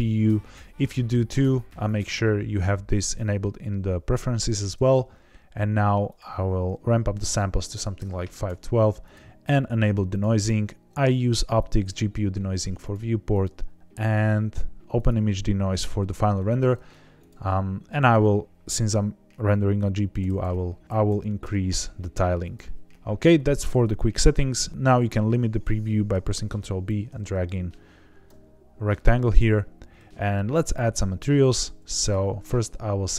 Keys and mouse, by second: 6.0 click, 8.5 right click, 9.0 click, 10.0 click, 10.4 click, 12.7 click, 13.4 click, 17.1 click, 17.9 click, 22.5 click, 26.3 ctrl+b, 31.9 click.